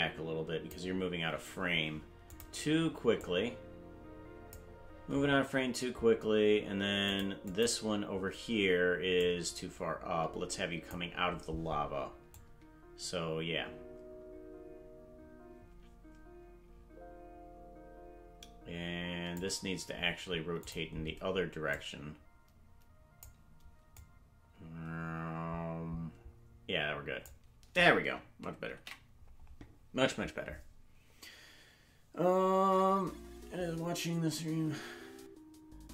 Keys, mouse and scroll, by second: 2.2 click, 3.2-4.5 drag, 7.0 click, 7.4 click, 9.1-10.9 drag, 12.3-14.5 drag, 17.3-19.4 drag, 20.6 click, 21.7-23.2 drag, 24.0-25.9 drag, 31.2 ctrl+s.